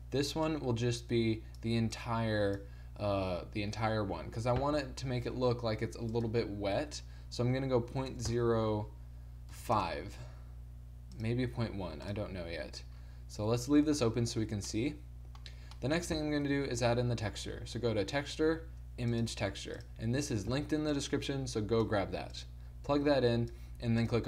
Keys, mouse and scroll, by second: 16.5 shift+a, 23.6 click.